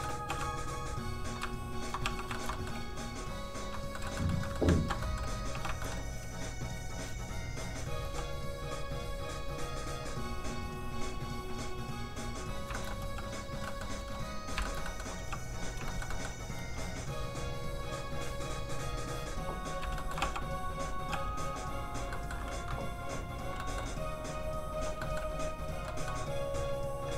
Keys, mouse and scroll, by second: 0.3 f, 0.5 click, 1.5 shift+click, 2.1 click, 2.4 shift+middle click, 2.5 middle click, 2.8 f, 3.0 click, 4.0 shift+middle click, 4.3 shift+middle click, 4.8 ctrl+z, 5.0 middle click, 5.6 click, 5.7 shift+click, 5.8 shift+middle click, 5.9 middle click, 6.8 click, 8.1 f, 8.2 click, 12.8 shift+middle click, 13.1 click, 13.1 f, 13.7 click, 13.7 middle click, 14.0 f, 14.1 click, 14.7 shift+middle click, 14.9 middle click, 15.2 f, 15.3 click, 15.6 click, 15.9 shift+middle click, 16.6 f, 16.8 click, 20.0 shift+middle click, 20.2 middle click, 20.3 f, 20.4 click, 21.1 f, 21.3 click, 21.4 click, 22.1 middle click, 22.9 click, 23.6 middle click, 24.3 click, 25.0 middle click, 25.6 click, 25.9 middle click, 26.5 click.